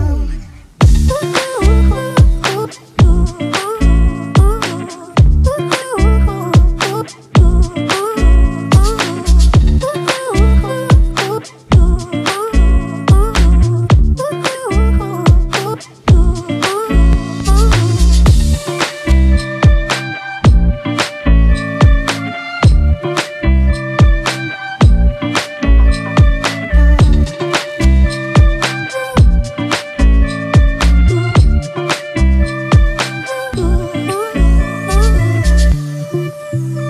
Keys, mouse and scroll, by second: 1.4 alt+click, 9.6 double click, 11.1 ctrl+t, 17.7 Return, 19.9 ctrl+t, 21.2 ctrl+click, 23.6 Return, 24.2 Left, 24.3 Left, 24.9 Right.